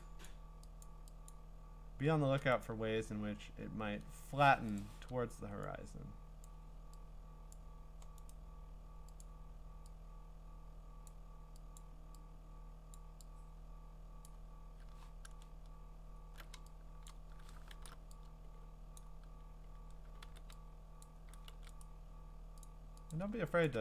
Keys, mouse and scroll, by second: 0.2 click, 0.8 click, 1.3 click, 2.6 right click, 4.8 click, 6.4 click, 8.3 right click, 11.0 click, 11.8 click, 12.9 click, 15.0-15.5 scroll, 16.1 scroll, 16.4 middle click, 17.1 click, 17.7 alt+shift+r, 19.0 click, 20.2 e, 21.0 click, 21.5 ctrl+z, 21.8 right click, 22.6 click, 23.1 click, 23.7 click.